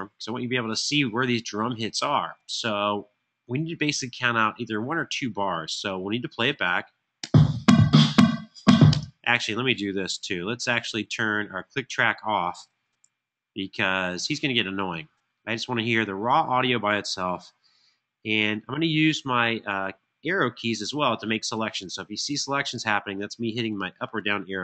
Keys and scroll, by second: 6.8 space, 9.0 shift+space, 12.7 Tab.